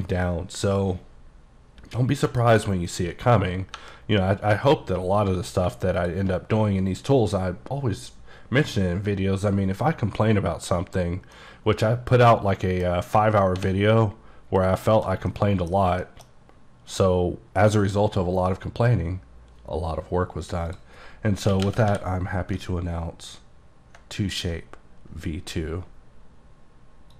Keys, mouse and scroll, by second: 2.1 middle click, 3.9 KP_Divide, 6.1 shift+click, 11.4 middle click, 13.7 h, 14.3-14.7 scroll up 1, 14.7 scroll down 2, 15.0 shift+middle click, 15.3-15.7 scroll up 1, 15.7 middle click, 15.9 scroll down 2, 16.1 shift+middle click, 20.8 click, 21.6-22.0 typing, 22.9-23.6 ctrl+scroll down 4, 23.6-24.2 ctrl+scroll up 1, 24.2 scroll up 1, 24.3 click.